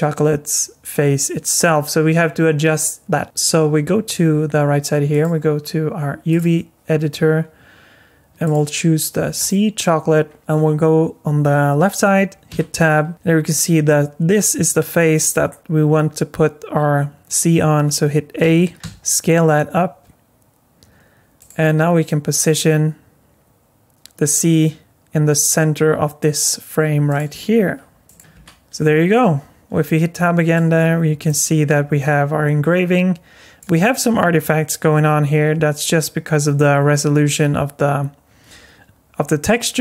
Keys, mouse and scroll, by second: 5.1 click, 8.4 click, 10.2-10.7 scroll down 3, 12.5 Tab, 18.4 a, 18.8 s, 21.6 g, 27.3 s, 28.3 Tab, 29.1 middle click, 30.8 scroll up 4, 31.3 alt+middle click, 38.5-39.7 scroll up 4, 39.7-39.8 scroll down 10.